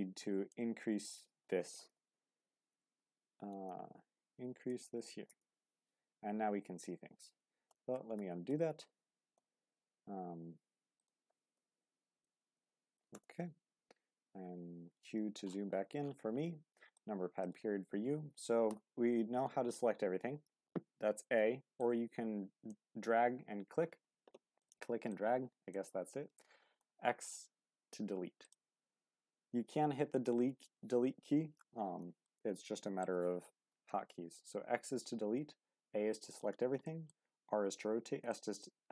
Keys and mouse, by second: 2.0 KP_0, 3.9 Left, 7.7 ctrl+z, 9.3 n, 9.9 n, 11.0-14.5 drag, 11.7 KP_0, 14.5 q, 17.0-17.4 drag, 18.7 n, 19.8 a, 21.8-22.9 drag, 24.6 click, 25.2-25.7 drag, 32.3-33.0 middle drag, 33.8 x, 35.7 a, 36.3 click, 36.8 shift+middle drag, 38.3 shift+middle click.